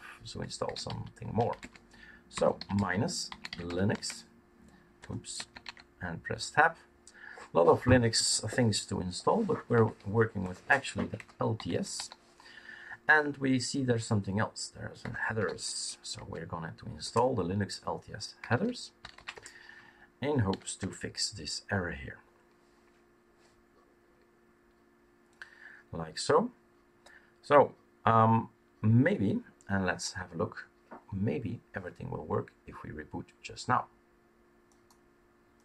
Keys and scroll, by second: 0.0-4.1 typing, 5.0 Tab, 5.3 Tab, 5.6 Tab, 5.8 typing, 8.1 typing, 9.8 typing, 10.9-12.4 typing, 15.1-16.2 typing, 17.0 Return, 18.1-21.0 typing.